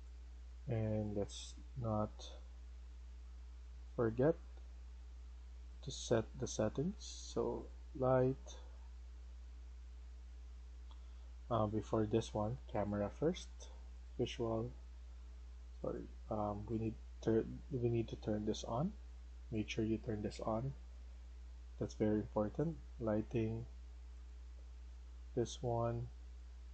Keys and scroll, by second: 0.0-0.6 typing, 4.2-5.3 typing.